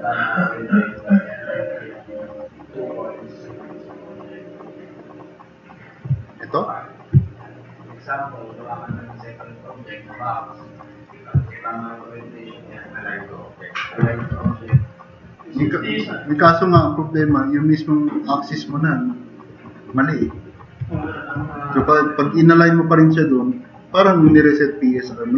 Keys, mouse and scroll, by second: 7.4-8.7 drag, 9.9 click, 10.7 click, 11.6 click, 14.3 4.